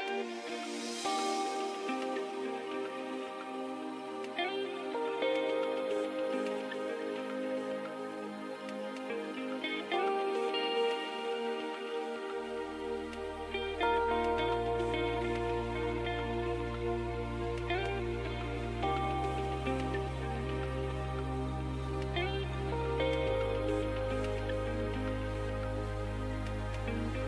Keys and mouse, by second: 0.7-4.3 drag, 4.3 ctrl+Tab, 10.1 z, 11.2 z, 14.5 ctrl+e, 17.5 ctrl+Tab, 19.1 l, 20.5 shift+h, 24.2 ctrl+Tab, 25.6 click.